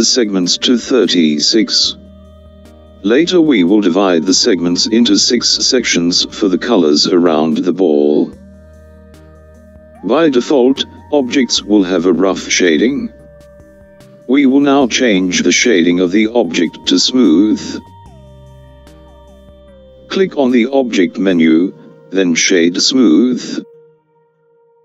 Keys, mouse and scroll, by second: 10.0 click, 17.8-21.0 scroll up 2, 21.0-24.8 drag.